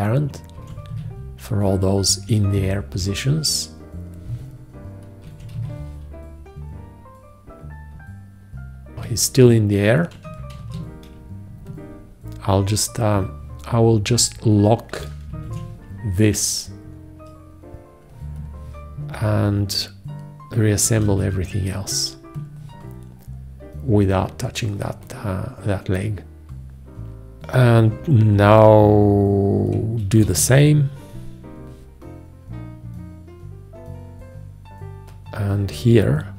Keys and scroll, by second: 5.5 1, 5.8 `, 10.8 ctrl+z, 15.7 shift+1.